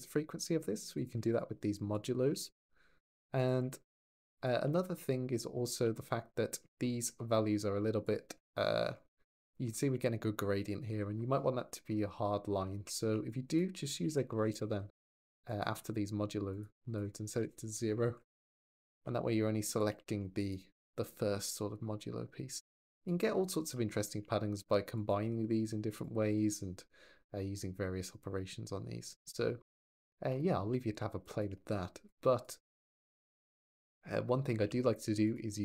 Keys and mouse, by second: 0.9 click, 1.7 click, 3.2 click, 3.4 4, 3.9 click, 4.7 ctrl+shift+click, 7.8 ctrl+shift+click, 13.1 click, 15.3 click, 16.3 click, 16.7-18.4 drag, 18.2 BackSpace, 19.7 shift+d, 20.2 click, 20.6 click, 24.9-25.8 drag, 31.0 ctrl+shift+click, 31.9 click, 32.5 g, 33.1 click, 34.5 shift+d, 35.1 click.